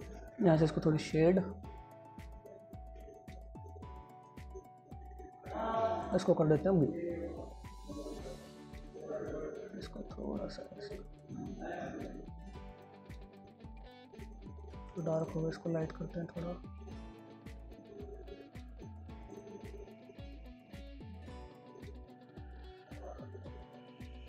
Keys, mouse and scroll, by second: 3.9 click.